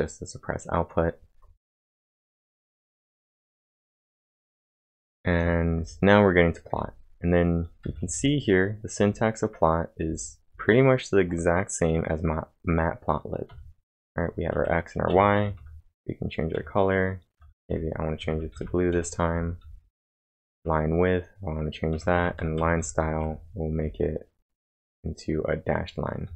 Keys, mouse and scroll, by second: 1.8-4.1 typing, 5.5-6.7 typing, 8.4-9.2 typing, 13.5 typing, 18.3-20.5 typing, 21.9-23.7 typing, 26.2 typing.